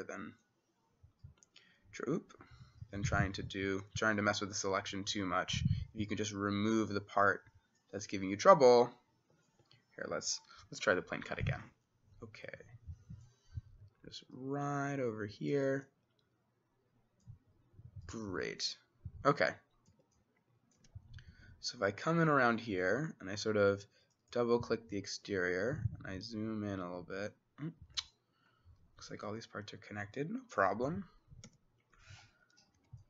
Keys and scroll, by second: 9.6 Escape, 19.9 Escape, 20.8 s, 29.2 Escape, 31.5 c, 32.8 s.